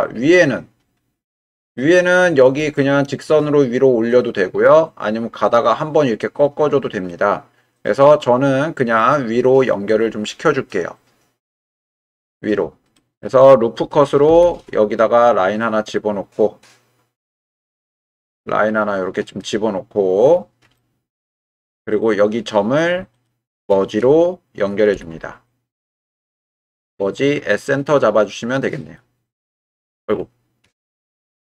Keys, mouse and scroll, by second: 1.7 middle click, 2.7 shift+middle click, 7.1-9.0 middle drag, 11.7 click, 12.9 middle click, 14.3 ctrl+r, 19.3-20.6 right drag, 20.8 shift+click, 24.9 m, 30.8 ctrl+z.